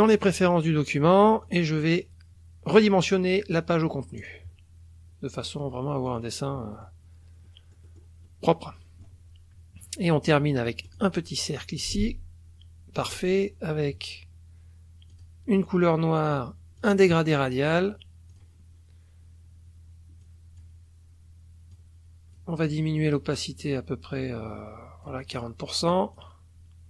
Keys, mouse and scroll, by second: 0.3 click, 1.4 click, 2.7 click, 4.2 click, 6.1 click, 6.7 click, 7.4 middle click, 7.7 click, 8.2 scroll up 1, 8.2-9.2 drag, 10.9 click, 11.8-13.2 ctrl+shift+drag, 15.1 click, 16.8 click, 18.3 click, 20.2 click, 21.9 click, 23.3-25.2 drag, 25.3 click, 25.8 click.